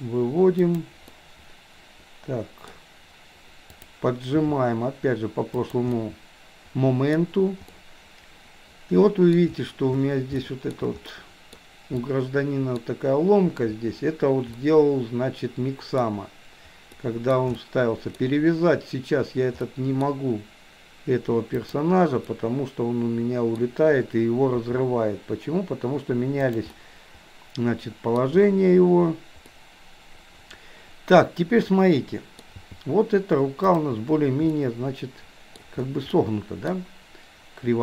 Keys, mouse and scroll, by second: 1.2-2.7 middle drag, 3.7 click, 4.4 g, 6.0-7.2 middle drag, 7.7-9.4 middle drag, 10.5-11.6 shift+middle drag, 12.0-12.6 scroll up 1, 12.6 middle click, 14.6-16.1 middle drag, 17.0 scroll up 1, 17.2-17.6 scroll down 1, 17.6-18.2 shift+middle drag, 19.6-20.2 scroll up 1, 21.5 click, 22.2-23.6 middle drag, 24.6 g, 26.7-28.1 middle drag, 29.5-30.1 scroll up 1, 30.1-32.5 middle drag, 32.6 g, 34.5-35.6 middle drag, 36.2 middle click.